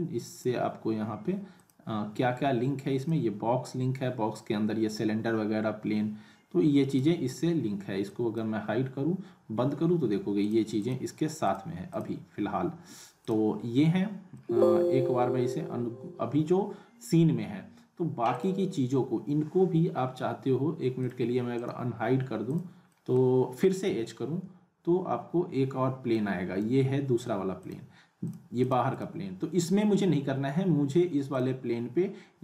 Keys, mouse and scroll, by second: 6.9 click, 8.1 click, 10.4 click, 14.3-16.4 scroll down 1, 18.3 click, 21.0 click, 21.5 right click, 22.4 click, 22.9 middle click, 23.8 h, 26.1-26.7 drag, 31.3 click.